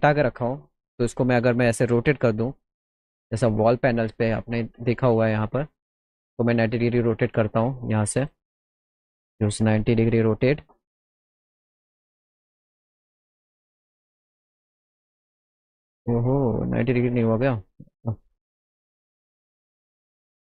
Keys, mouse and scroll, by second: 0.4 click, 1.9 click, 3.9 click, 5.6 click, 6.4 click, 7.3 ctrl+z, 8.2 right click, 9.4 click, 10.7 click, 12.9 click, 13.8 click, 14.8 click, 15.3 ctrl+z, 16.0 click, 17.4 click, 18.3 KP_9, 18.5 KP_0, 20.1 click.